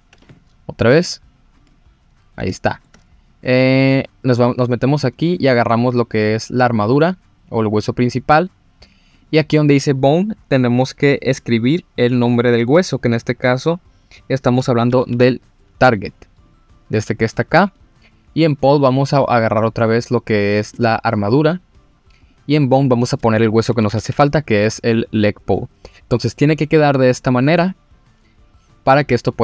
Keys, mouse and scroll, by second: 0.9 click, 1.6 click, 2.0 scroll down 1, 2.5-2.8 shift+middle drag, 5.0 click, 9.1-16.6 drag, 17.7 click, 22.2-25.6 drag.